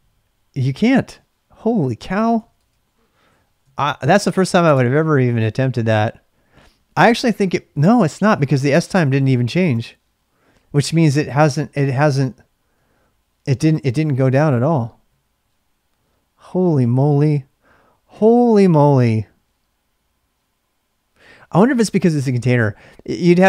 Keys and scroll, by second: 2.3-4.1 typing, 4.7 Return, 12.7 Up, 15.0 Up.